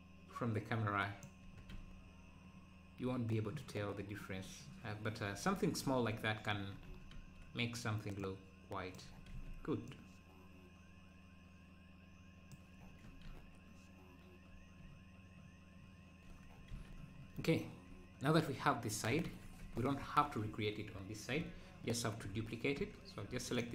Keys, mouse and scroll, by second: 1.4 Tab, 6.9 Tab, 8.3 click, 9.3 ctrl+z, 9.8-13.2 drag, 13.2 Tab, 13.3 `, 14.8 `, 16.0 Tab, 17.2 scroll down 1, 18.2-18.9 scroll up 1, 19.6 Tab, 22.8 Tab.